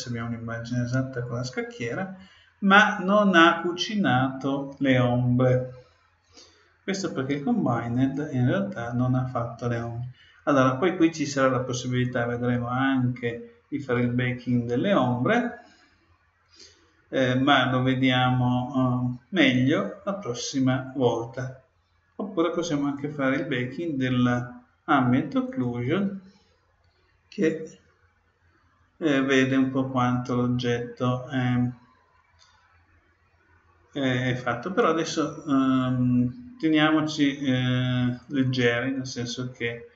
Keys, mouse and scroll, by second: 6.4-8.6 middle drag, 7.9-9.6 drag, 25.4-27.1 drag, 38.1-39.9 drag.